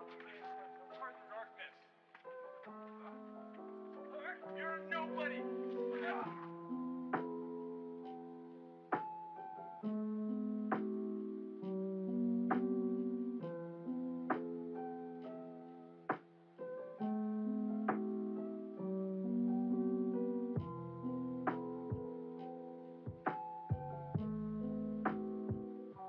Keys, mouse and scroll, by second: 0.7-1.4 drag, 1.9 click, 3.2 click, 5.2-6.3 drag, 7.5 click, 8.2 click, 13.1-14.7 drag, 17.2 g, 22.3 x, 23.0 click, 23.6 click, 25.4 click.